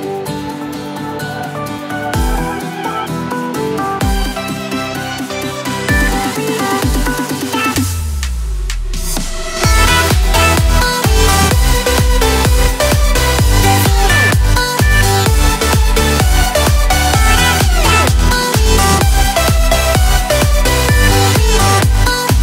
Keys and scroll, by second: 18.8 ctrl+i.